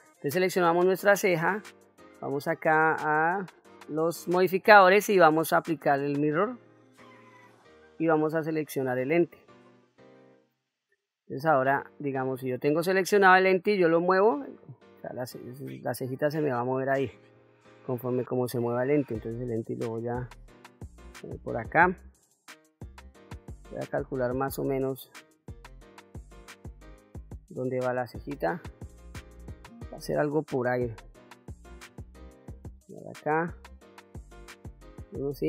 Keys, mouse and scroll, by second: 0.0 click, 2.5 click, 4.3-7.0 drag, 8.3 click, 12.5 click, 14.0-16.9 drag, 17.4 ctrl+z, 18.9-21.4 drag, 23.8-27.7 drag, 32.1 KP_7, 34.4 KP_1.